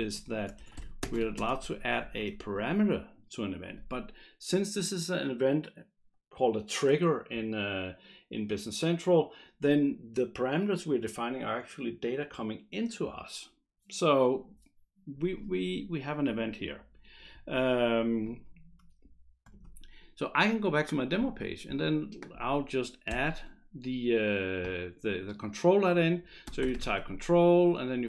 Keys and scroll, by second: 0.0-3.2 typing, 23.1 Return, 26.3-27.5 typing.